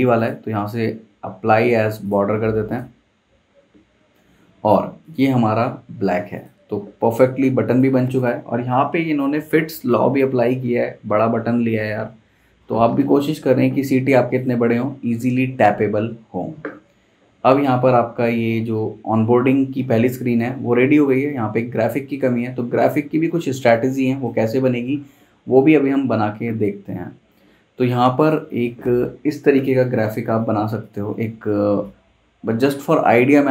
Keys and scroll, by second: 30.0 p.